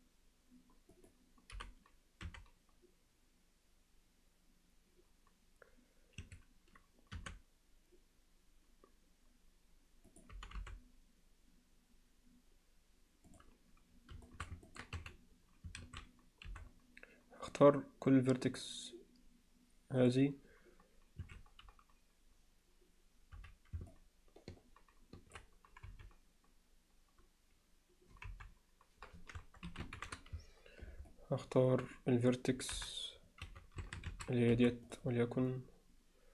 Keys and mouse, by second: 1.5 g, 7.2 r, 10.3 g, 14.3 alt+shift+middle click, 14.7 ctrl+middle click, 15.0 z, 15.8 alt+a, 16.5 c, 23.4 z, 23.9-25.4 middle drag, 25.9 KP_Divide, 28.3 KP_Divide, 29.7 ctrl+l, 30.0 shift+h, 31.1 alt+middle click, 32.8 KP_7, 33.5 z, 33.8 a, 34.5 c.